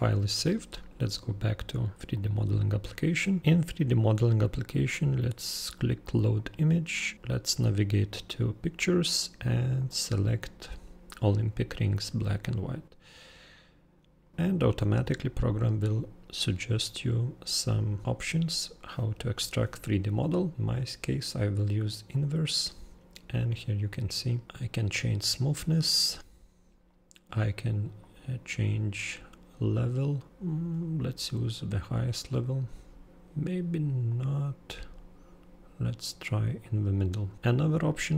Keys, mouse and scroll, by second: 2.1 super+click, 6.3 super+click, 9.8 super+click, 22.1 super+click, 23.5 super+click, 24.8 super+click, 28.0 super+click, 34.1 super+click.